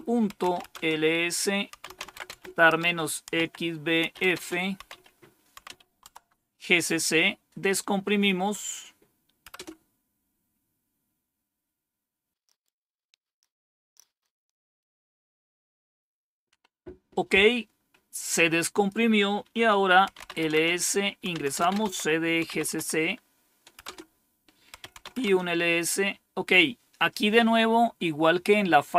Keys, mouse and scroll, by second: 0.0-5.5 typing, 6.0 Tab, 9.4 Return, 12.3 Return, 13.6-15.8 scroll down 1, 15.8-17.9 scroll down 1, 17.9-18.6 scroll down 1, 18.6 click, 19.7-22.6 typing, 23.7-25.4 typing, 27.3-28.0 typing.